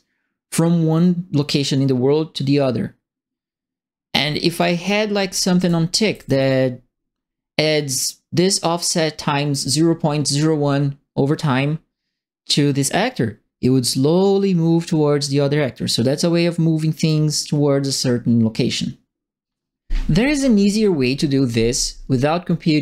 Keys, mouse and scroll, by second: 5.3-6.1 typing, 5.3 right click, 14.2-17.0 right drag.